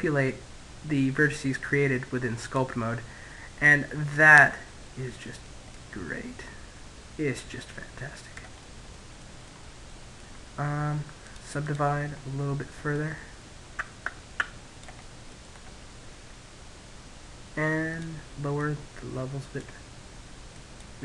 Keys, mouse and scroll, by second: 1.0 click, 3.3-4.3 middle drag, 4.3 click, 7.2-9.7 middle drag, 9.7-13.3 drag, 10.1 middle click, 11.1-12.5 middle drag, 13.5-15.7 middle drag, 16.4-18.7 drag, 18.9-21.0 drag.